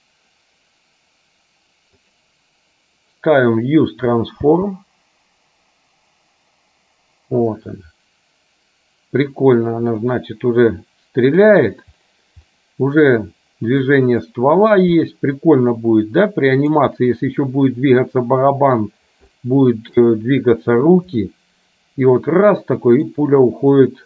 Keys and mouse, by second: 4.5 space, 10.1-11.5 middle drag, 12.6-14.0 middle drag, 15.9 middle click, 19.4 shift+middle click, 21.3-23.1 middle drag.